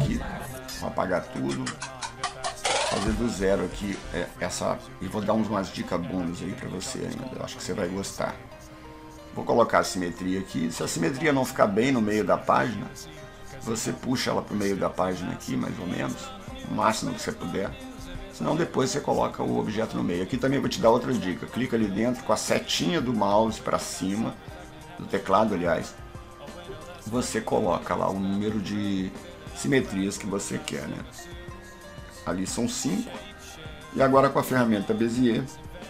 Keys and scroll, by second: 7.8 alt+s, 24.8 Up, 35.4 F2.